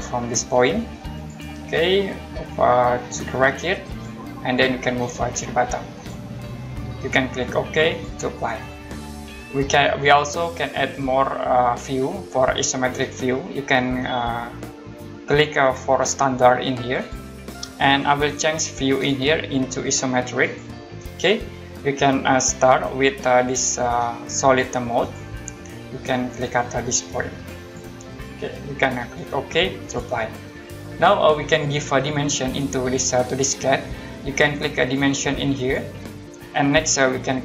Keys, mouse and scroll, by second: 1.1 click, 3.9 click, 5.9 click, 7.9 click, 16.9 click, 18.9 click, 20.4 click, 25.0 click, 27.6 click, 29.8 click, 35.5 click.